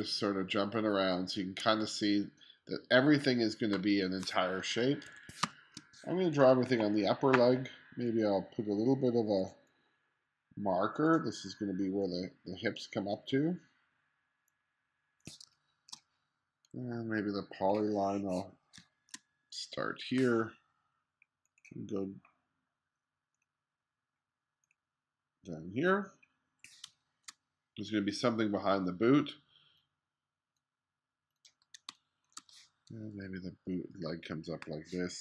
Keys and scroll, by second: 5.1 1, 5.5 space, 6.7 1, 15.5 space, 18.8 space, 26.9 space, 32.0 space.